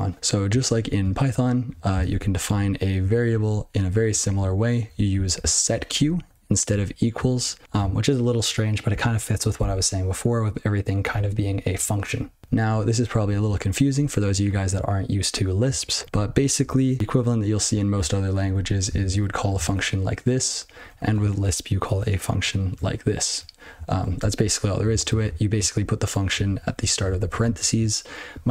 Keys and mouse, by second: 0.7 ctrl+p, 0.9 ctrl+f, 1.9 ctrl+space, 2.0 ctrl+f, 2.4 ctrl+e, 2.9 ctrl+g, 3.3 ctrl+b, 3.3 ctrl+n, 3.8 ctrl+p, 4.0 ctrl+n, 4.3-4.8 ctrl+b, 5.1 ctrl+f, 5.5 ctrl+alt+space, 5.9 ctrl+g, 6.1 ctrl+p, 6.6-7.1 ctrl+f, 7.4 ctrl+b, 7.6 ctrl+b, 8.7 ctrl+b, 12.4 ctrl+n, 12.6-13.0 ctrl+b, 13.1 ctrl+b, 13.3 ctrl+b, 13.9 ctrl+f, 14.1 ctrl+f, 16.0 ctrl+f, 16.2 ctrl+f, 17.5 ctrl+{, 18.5 ctrl+b, 18.8 ctrl+d, 19.1 BackSpace, 19.6 ctrl+/, 20.8 ctrl+f, 22.4 ctrl+(, 23.0 ctrl+f, 23.2 ctrl+f, 23.3 ctrl+f, 23.7 ctrl+a, 23.9 ctrl+a, 24.1 ctrl+f, 24.3 ctrl+f, 24.9 ctrl+alt+f, 25.8-26.3 ctrl+b, 26.4 ctrl+b, 26.8 ctrl+f, 27.0 ctrl+f, 27.2 ctrl+f, 27.4 ctrl+f.